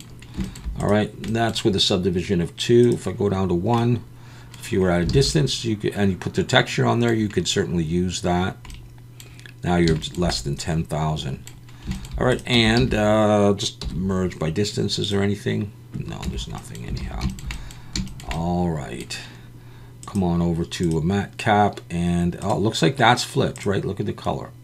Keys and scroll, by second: 5.1 alt+a, 12.6 Tab, 12.8 a, 13.8 m, 16.3 Tab, 17.0 alt+a.